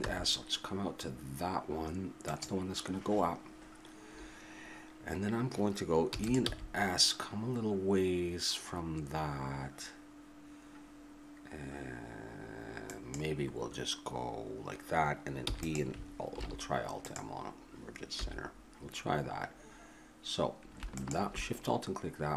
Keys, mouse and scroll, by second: 0.0 s, 6.1 e, 6.4 s, 15.4 e, 16.4 alt+m, 18.1 a.